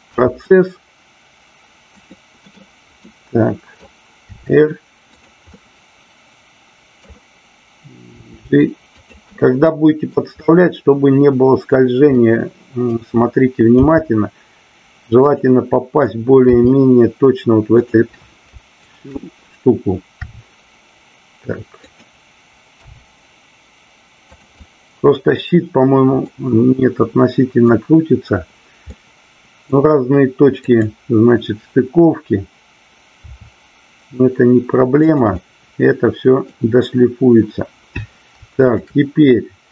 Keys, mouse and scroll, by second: 0.1 g, 2.0 click, 2.4 middle click, 3.1 scroll up 1, 3.2 middle click, 4.3 r, 5.2 click, 5.4-7.0 middle drag, 8.9 click, 9.2-10.1 middle drag, 12.2 middle click, 15.3 click, 17.8 drag, 17.8 r, 21.9 click, 22.8 g, 24.5-25.3 middle drag, 26.2-27.7 middle drag, 28.8 scroll up 1, 28.9-29.7 middle drag, 30.5 click, 33.2 r, 34.9 click, 35.4-36.5 middle drag, 38.7-39.2 shift+drag.